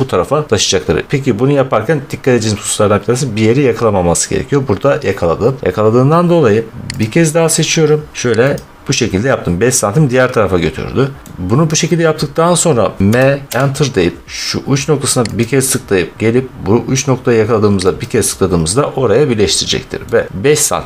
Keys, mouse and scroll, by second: 6.9 click, 8.4 click, 10.7-11.6 scroll, 13.0-13.5 typing, 15.3 click, 17.9 click, 18.7 middle click, 18.8 middle click, 18.9 middle click, 19.9 middle click.